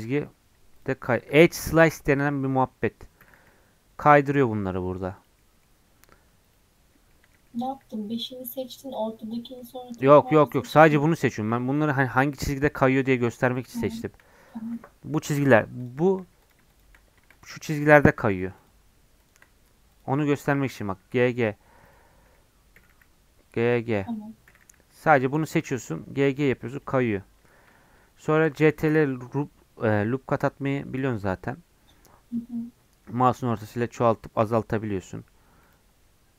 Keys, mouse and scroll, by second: 3.2 g, 5.3 middle click, 6.1 g, 7.1 middle click, 7.6 shift+scroll down 1, 7.7-10.6 middle drag, 10.6 click, 11.5 2, 11.7-20.6 drag, 20.6 g, 22.7 g, 25.3 click, 25.6 g, 26.9 scroll down 4, 27.1-28.7 middle drag, 28.7 ctrl+r.